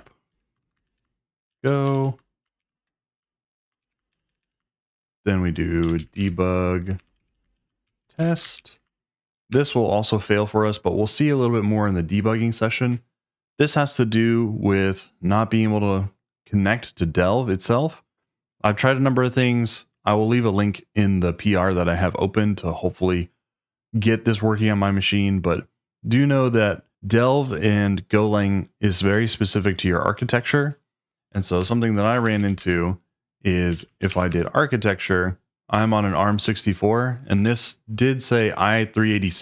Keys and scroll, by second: 0.0-2.8 typing, 2.6 shift+Tab, 3.8 o, 4.1 Right, 5.1-9.1 typing, 9.5 Return, 31.6 Return, 32.0-34.6 typing.